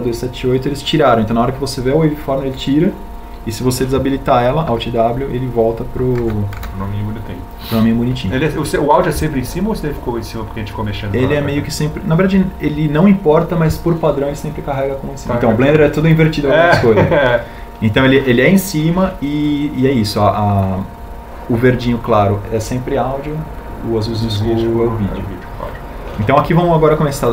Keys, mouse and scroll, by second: 6.3 alt+w, 8.5 w.